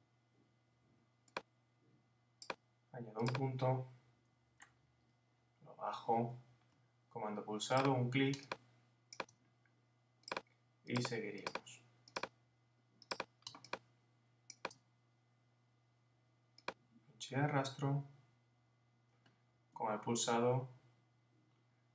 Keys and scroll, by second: 4.6 Down.